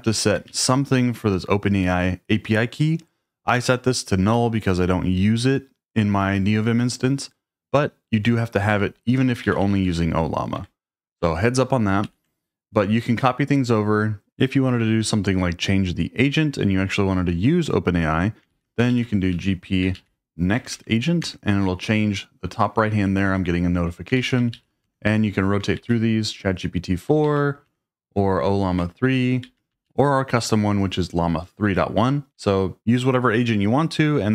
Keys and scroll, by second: 0.0-2.7 typing, 8.2 Escape, 8.5-10.1 typing, 10.6 Escape, 12.0 ctrl+l, 18.3-20.0 typing, 20.6 Tab, 20.7 Tab, 21.2 Return, 24.2 shift+;, 24.6 Up, 24.8 Return, 25.8 shift+;, 27.3 Up, 27.7 Return, 29.4 shift+;, 32.3 Escape.